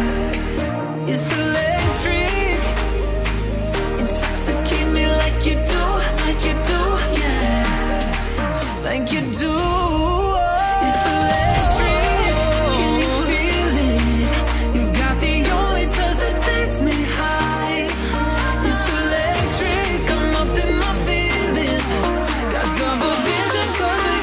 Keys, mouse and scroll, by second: 1.7 click, 4.2-5.0 typing, 5.6 click, 15.6 click, 19.7 click.